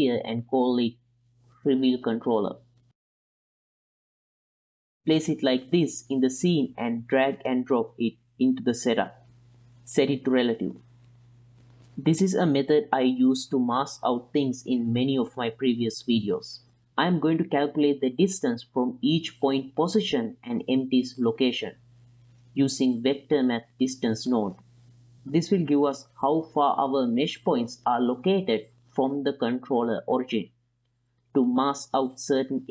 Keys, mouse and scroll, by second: 0.3 z, 1.2 KP_1, 1.6 s, 2.7-3.2 drag, 3.5 g, 4.4 F2, 5.1 BackSpace, 6.2 l, 7.4 click, 7.8-8.6 middle drag, 9.2 click, 10.8 ctrl+middle click, 11.1 click, 11.3 middle click, 14.4 shift+a, 19.2-22.9 drag, 23.4-23.9 drag, 24.4 click, 25.1 middle click, 25.9 ctrl+shift+click, 26.5 ctrl+shift+click, 27.2-27.9 drag, 29.2 g, 31.9-32.2 drag, 32.5 click.